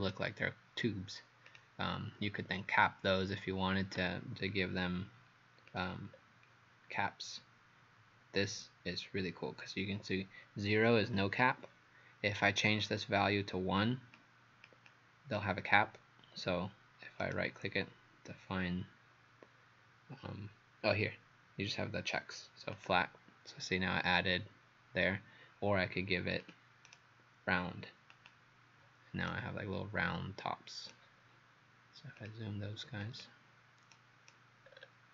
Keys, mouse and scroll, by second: 1.5 click, 6.2-6.5 scroll down 1, 17.2 right click, 22.8 click, 26.9 right click, 28.1 click, 29.3 right click, 32.2 click, 33.9 right click, 34.7-35.1 scroll up 8.